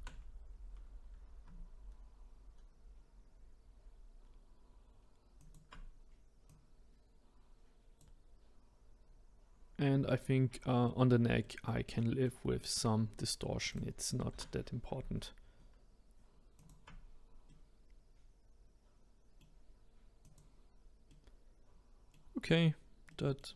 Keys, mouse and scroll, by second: 6.5 click, 9.0-9.7 scroll down 1, 9.7 middle click, 10.5-10.8 scroll down 1, 10.8-13.7 middle drag, 13.7 click, 14.3 r, 17.4-20.2 middle drag, 20.2 click, 21.1-23.5 middle drag.